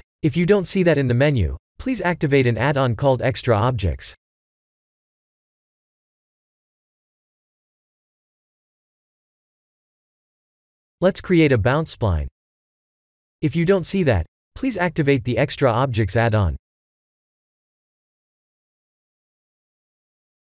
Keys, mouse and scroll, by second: 1.4 shift+a, 15.3 shift+a.